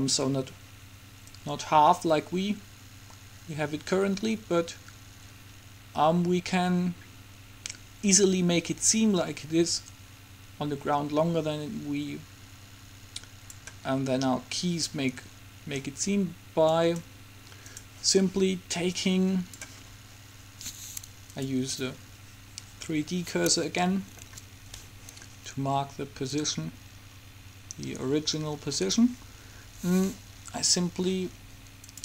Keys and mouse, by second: 1.5-3.4 drag, 17.0-18.5 right drag, 19.0-21.0 drag, 21.0 middle click, 21.5-23.3 drag, 24.0-25.8 middle drag, 26.5-28.3 drag, 28.2 typing.